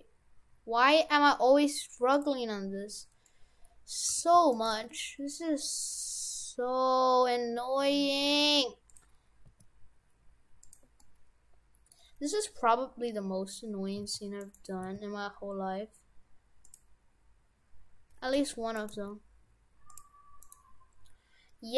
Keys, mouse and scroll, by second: 2.5-3.1 scroll up 5, 3.3 middle click, 4.1 g, 4.7 g, 9.5 s, 11.0 middle click, 12.2 scroll down 1, 14.0 s, 14.8 s, 17.2-17.6 scroll down 1, 18.3 g, 18.9 g, 20.5 right click.